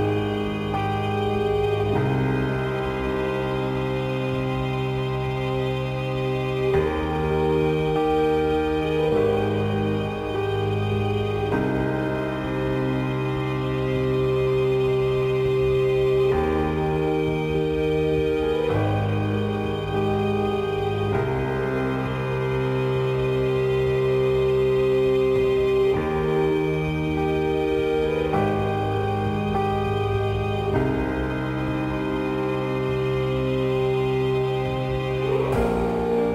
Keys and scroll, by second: 0.9 ctrl+j, 4.9 space, 6.5 ctrl+j, 9.7 space, 11.0 ctrl+j, 12.1 space, 15.9 ctrl+j, 20.6 space, 26.7 ctrl+g, 33.7 Return.